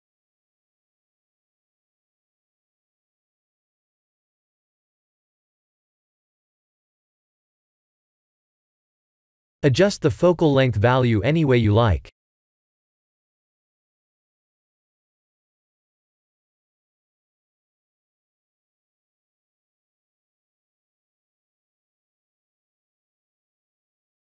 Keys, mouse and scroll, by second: 0.3-2.0 drag, 4.5-6.6 drag, 6.9-8.6 drag, 9.5-15.5 drag, 15.7 click, 17.0-21.7 drag, 22.2-23.6 drag.